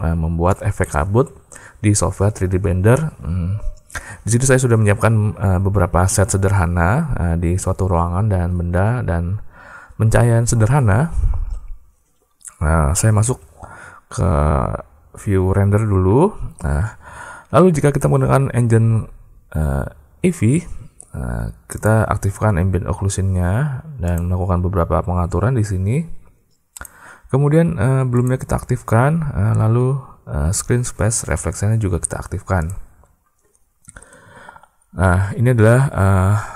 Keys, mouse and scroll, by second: 13.1 z, 21.7 click, 23.9 click, 26.6 click, 28.0 click, 32.5 click.